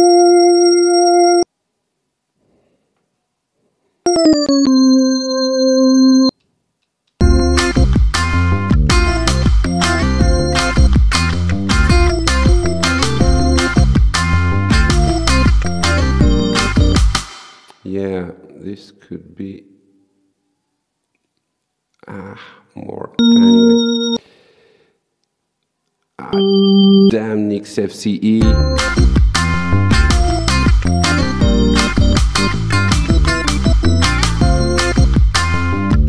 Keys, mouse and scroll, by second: 1.2 click, 4.1 ctrl+v, 6.0 click, 7.2 space, 17.2 space, 23.2 click, 26.3 click, 28.4 space.